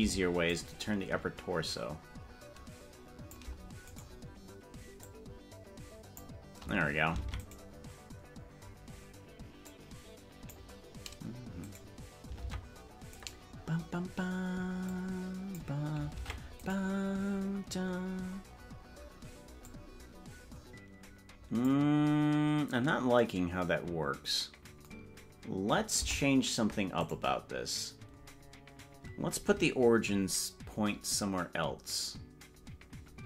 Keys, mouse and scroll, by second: 0.5-3.5 shift+drag, 4.1 right click, 5.0-6.3 drag, 7.5 ctrl+Tab, 7.7 right click, 9.8 click, 12.1 right click, 12.7 ctrl+Tab, 13.3 right click, 15.0 click, 16.3 ctrl+Tab, 16.9 right click, 19.6-21.8 drag, 26.1 Tab, 27.1 right click.